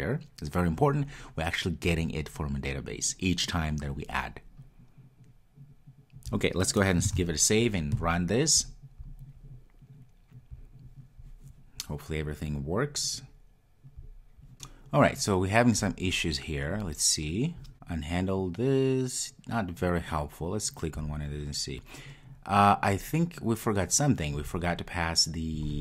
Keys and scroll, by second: 7.2 super+s, 10.5 super+s, 10.7 ctrl+r.